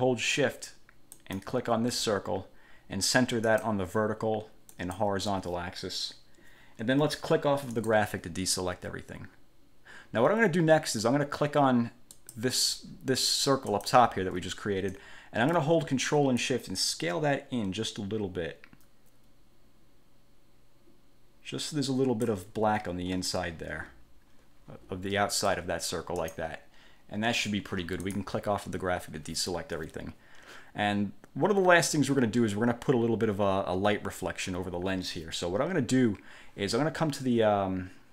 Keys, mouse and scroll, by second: 1.3 shift+click, 3.6 click, 4.9 click, 7.9 click, 12.3 click, 13.4 click, 14.4 ctrl+z, 16.6-22.6 ctrl+shift+drag, 26.4 click, 28.2 click.